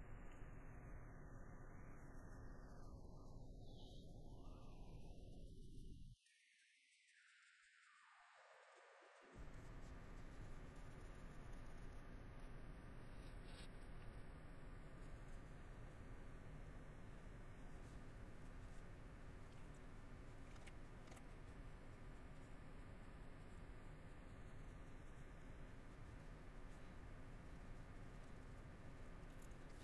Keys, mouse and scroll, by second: 0.4 middle click, 0.9 middle click, 1.4 middle click, 2.3 middle click, 2.9 middle click, 3.5 middle click, 5.0 middle click, 5.9 middle click, 7.9 middle click, 8.9 middle click, 10.5 middle click, 12.1 middle click, 12.6 middle click, 14.3 middle click, 15.1 middle click, 17.6 middle click, 18.0 middle click, 18.8 middle click, 19.7 middle click, 22.5 middle click, 23.5 middle click, 25.3 middle click, 26.8 middle click, 28.7 middle click, 29.3 scroll, 29.5 middle click.